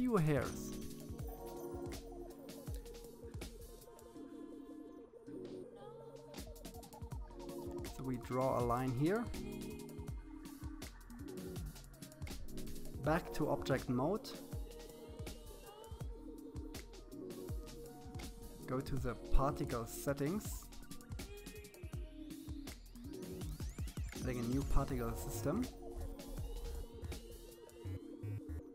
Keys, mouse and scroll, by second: 2.3-4.0 drag, 9.0-9.6 scroll down 4, 9.6 middle click, 10.5 KP_1, 11.6-12.7 shift+middle drag, 12.7-14.3 drag, 15.5-17.1 middle drag, 21.8 click, 22.4-22.9 scroll up 8, 23.4-25.1 drag, 26.6-27.8 drag.